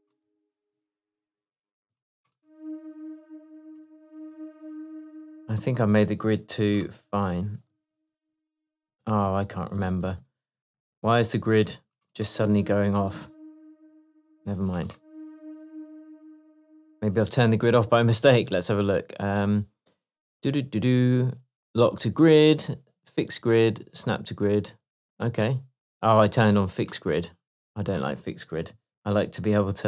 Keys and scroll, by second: 0.8 super+1, 3.3 BackSpace, 4.6 BackSpace, 7.0 super+2, 7.2 super+2, 9.0 super+i, 13.2 BackSpace, 13.8 super+BackSpace, 13.9 super+2, 15.5 Left, 16.2 BackSpace, 29.0 super+2.